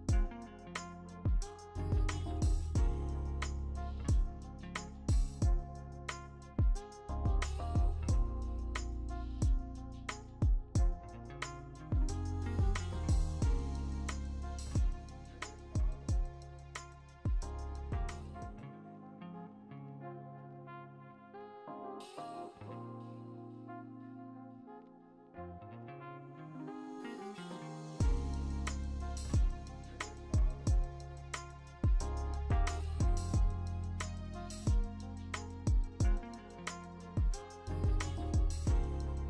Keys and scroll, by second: 1.4 w, 2.9 w, 4.2 b, 4.9 b, 8.1 ctrl+d, 8.3 0, 9.6 m, 10.5 b, 11.0 ctrl+alt+z, 11.2 3, 11.7 ctrl+d, 12.7-13.2 scroll, 13.2 scroll down 10, 14.7 b, 16.1 b, 16.7 x, 17.2 ctrl+z, 17.4 0, 19.6-21.4 typing, 21.3 ctrl+z, 23.2 ctrl+z, 23.9 ctrl+z, 25.7 3, 26.9 3, 28.0 ctrl+z, 28.2 x, 29.1 x, 29.5 ctrl+z, 33.5 scroll, 34.7 ctrl+alt+g, 36.2 scroll down 6, 37.0 ctrl+i, 37.0 b, 37.5 x, 38.5 x.